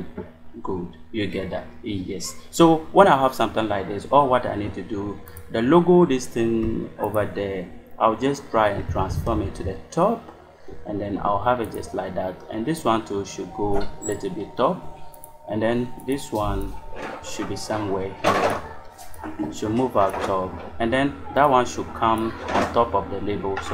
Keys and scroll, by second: 8.6 shift+Up.